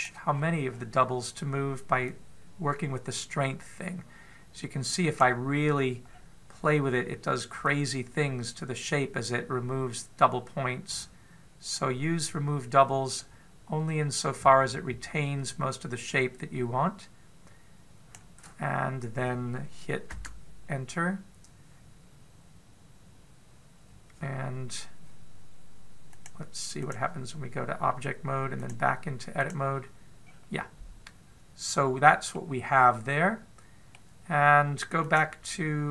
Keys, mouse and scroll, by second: 1.1-2.3 scroll up 8, 2.8 click, 6.4-7.3 scroll down 7, 8.4 click, 20.9 Return, 26.9 click, 27.8 click, 29.4 click, 31.0-32.6 scroll up 2, 33.1 middle click, 35.8 click.